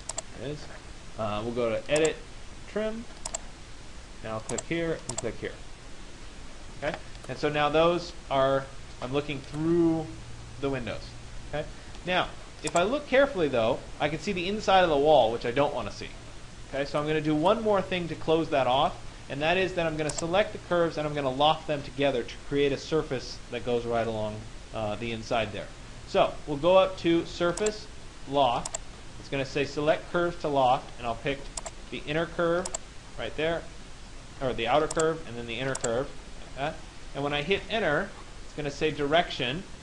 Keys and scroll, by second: 37.1 Return.